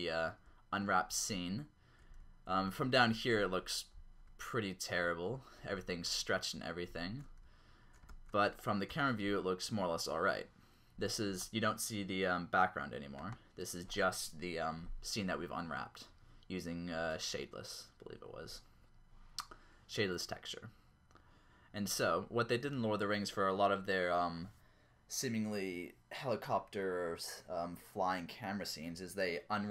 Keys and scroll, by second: 0.5-1.1 typing, 2.2-3.1 typing, 4.4-8.9 typing, 11.7-12.4 typing.